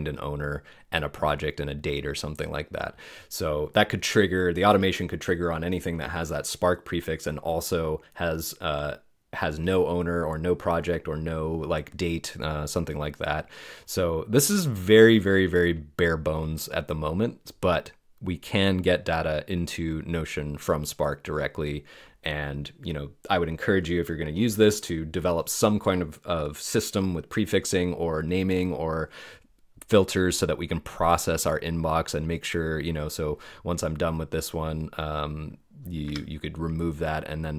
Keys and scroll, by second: 36.0 BackSpace.